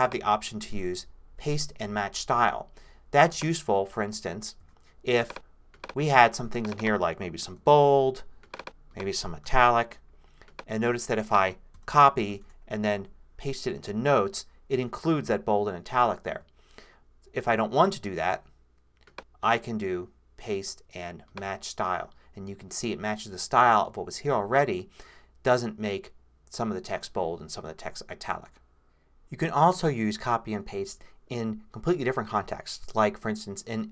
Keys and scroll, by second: 4.6 super+z, 7.5 super+b, 9.4 super+i, 11.7 super+c, 12.4 super+Tab, 13.8 super+v, 18.1 super+z.